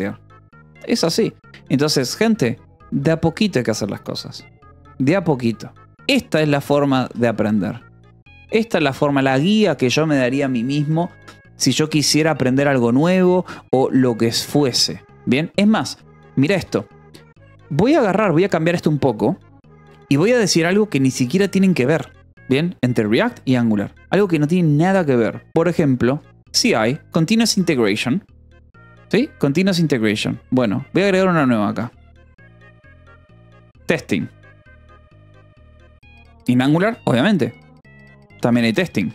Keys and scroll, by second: 2.4 k, 3.1 j, 5.8 k, 7.2 j, 9.6 Escape, 11.3 ctrl+s, 17.1 a, 17.4 Escape, 17.8 o, 18.1 Return, 21.1 #, 21.6 space, 26.4 Escape, 30.5 k, 31.7-35.7 typing, 36.9-39.1 typing.